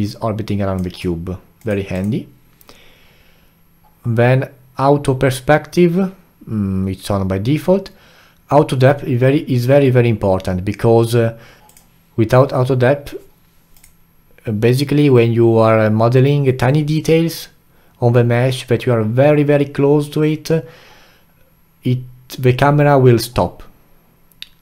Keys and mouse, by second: 11.6-13.5 alt+middle drag.